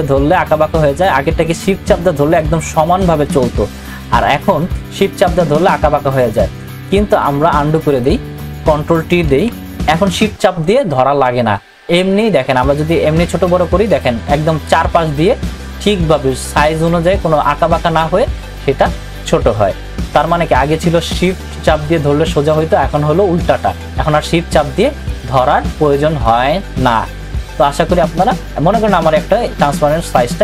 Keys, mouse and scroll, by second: 7.9 click, 9.3 ctrl+t, 12.9-25.0 drag, 25.0-30.4 drag.